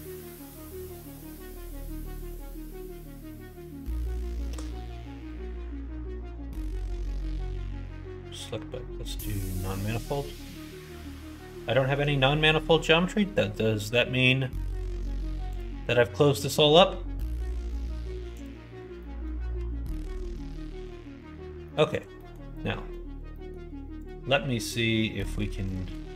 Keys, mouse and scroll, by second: 0.4 scroll down 1, 0.9 scroll up 1, 0.9 middle click, 1.4 scroll down 1, 1.7 scroll up 2, 1.8 middle click, 2.6 scroll down 2, 3.2 middle click, 3.3-3.8 scroll down 2, 3.8 scroll up 2, 3.8 middle click, 5.2-9.3 drag, 9.8 middle click, 10.4 click, 10.9-11.9 middle drag, 15.5-18.4 drag, 18.9 middle click, 19.6 alt+z, 20.2 alt+z, 20.7 alt+z, 21.6 middle click, 21.9 click, 22.2 middle click, 22.5 middle click, 23.3 middle click, 23.9 click, 25.2 click, 25.7-26.1 drag.